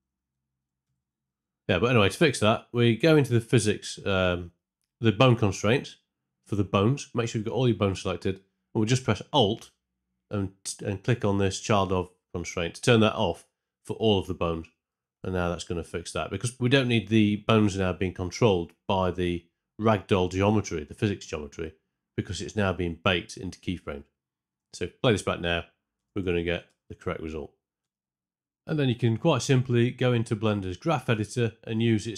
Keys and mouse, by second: 0.1 Left, 0.2 Left, 0.3 Left, 0.5 Left, 0.8 Right, 1.0 Right, 1.1 Right, 1.3 Right, 1.4 Right, 1.5 Right, 1.7 Right, 7.4 middle click, 7.8 a, 13.9 alt+click, 24.5 space, 25.9 space, 26.2 shift+Left, 26.6 space, 27.8 space, 27.9 shift+Left, 29.7 ctrl+space, 29.8 ctrl+middle click, 31.4-32.1 drag.